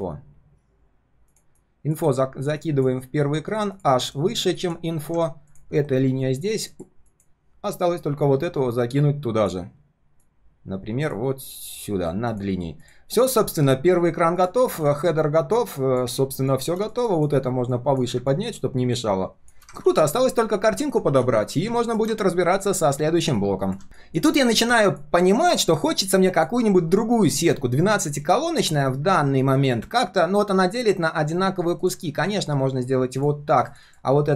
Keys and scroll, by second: 4.1 ctrl+], 19.9 ctrl+s, 21.1 ctrl+s, 23.8 ctrl+shift+4, 24.3 ctrl+shift+4, 28.2 ctrl+shift+4.